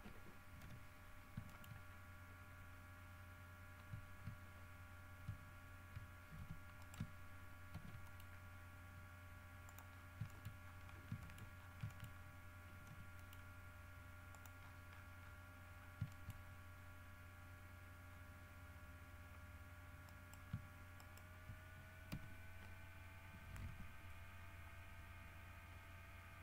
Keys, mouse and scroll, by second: 0.8 l, 1.3 scroll down 1, 1.7 shift+middle click, 4.6-5.3 shift+scroll down 3, 6.5 shift+g, 7.0 shift+right click, 7.9 shift+d, 8.2 shift+click, 9.8 click, 10.1-12.5 scroll up 5, 10.5 shift+middle click, 11.4 shift+middle click, 12.1 shift+middle click, 13.1 g, 13.3 middle click, 14.5 click, 14.8-16.2 scroll down 8, 16.3 shift+middle click, 16.5 shift+scroll up 2, 18.3 scroll down 2, 19.4 scroll up 2, 20.3 right click, 21.1 shift+right click, 22.3 f, 23.8 n, 24.5 scroll down 2, 25.2-26.1 scroll down 4.